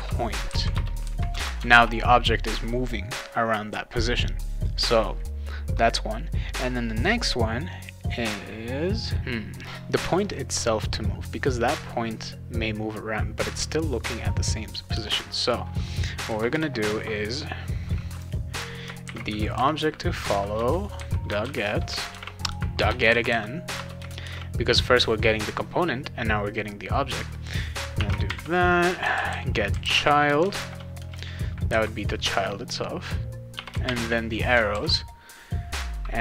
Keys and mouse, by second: 0.0-1.3 typing, 0.7 Return, 1.7 ctrl+s, 14.9 BackSpace, 16.3 ;, 16.5 Return, 18.8-24.7 typing, 20.5 Return, 28.0-31.0 typing, 33.5 -, 33.8 shift+., 34.7 ctrl+s.